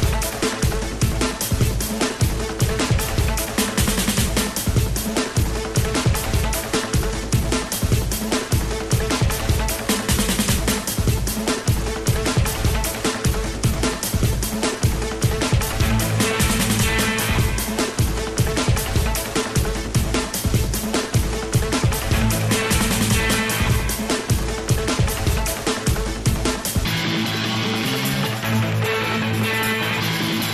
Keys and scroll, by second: 10.4 i, 19.4 i.